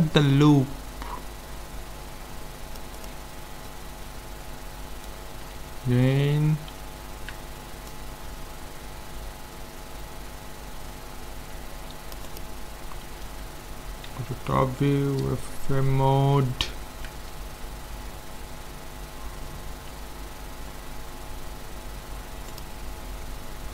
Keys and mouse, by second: 3.7-5.5 middle drag, 6.9 ctrl+r, 13.2 KP_7, 14.1 z, 14.6 right click, 19.9 s, 20.6 middle click, 23.6 z.